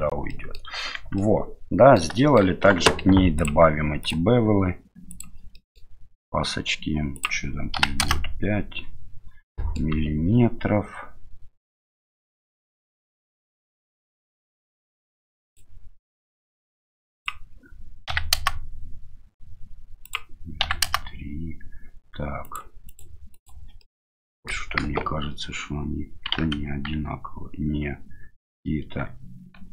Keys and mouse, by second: 0.3 middle click, 0.9 Tab, 1.1-2.0 middle drag, 2.2 shift+middle drag, 4.1-5.2 drag, 5.5 middle click, 7.2-8.4 drag, 9.5 middle click, 12.8-14.2 middle drag, 15.4 click, 17.3-19.5 drag, 20.1-21.5 drag, 22.5 click, 23.0 click, 23.4 click, 23.8-24.5 middle drag, 24.8 KP_1, 26.5 KP_3, 28.8 KP_1, 29.5 KP_3.